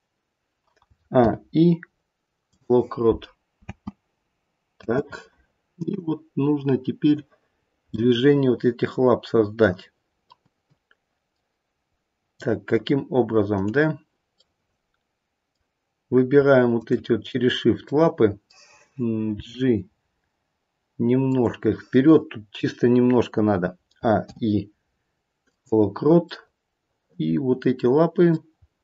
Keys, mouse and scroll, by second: 0.8 a, 1.1 i, 3.5 space, 4.8 space, 5.9 click, 7.5 scroll up 2, 7.9 middle click, 8.3 middle click, 10.6 middle click, 10.7 middle click, 13.4 click, 14.4 middle click, 14.5 middle click, 16.8 shift+click, 17.9 middle click, 19.3 g, 23.9 a, 24.2 i, 26.3 middle click, 28.5-28.8 scroll up 2.